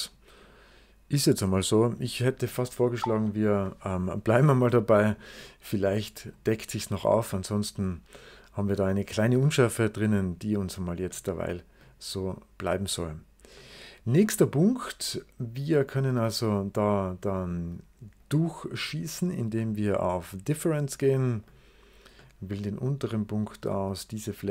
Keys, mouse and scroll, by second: 1.2 click, 1.5 click, 2.2 click, 3.0 BackSpace, 5.8-6.8 middle drag, 6.2 right click, 7.3 right click, 8.7 middle click, 11.0 middle click, 13.5-16.7 middle drag, 18.0 click, 19.5-20.7 middle drag, 20.7 click, 21.3 click, 22.1-23.3 middle drag, 23.3-24.5 drag.